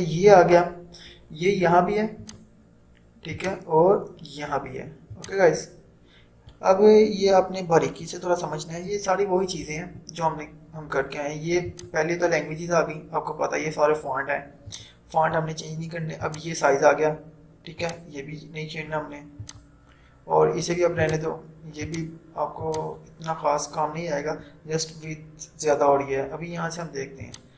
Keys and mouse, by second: 2.3 click, 11.8 click, 14.9 click, 27.3 click.